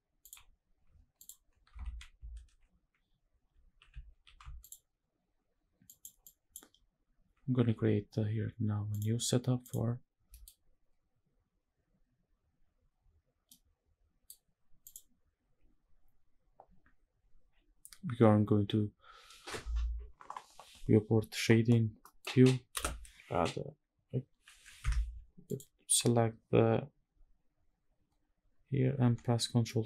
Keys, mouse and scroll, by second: 0.9 click, 5.5 click, 5.9 click, 8.6 click, 9.3 click, 11.4 scroll down 1, 11.5 middle click, 11.5-12.2 scroll up 1, 13.2-13.9 middle drag, 14.6 click, 21.7 middle click, 22.4 space, 25.1 click, 28.6 ctrl+t, 29.4 middle drag.